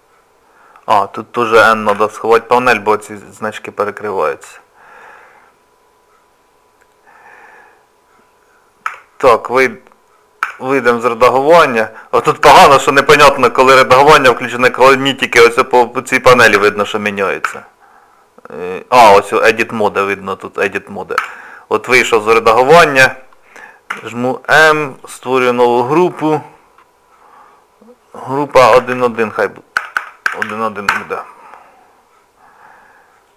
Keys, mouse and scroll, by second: 4.6 shift+middle click, 10.9 click, 12.5 Tab, 30.0 BackSpace, 30.4 1.